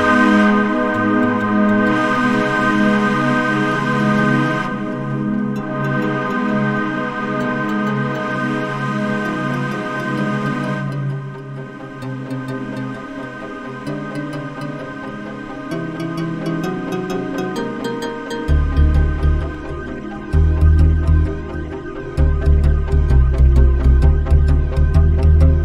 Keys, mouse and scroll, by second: 10.1-13.5 drag, 24.3 F1.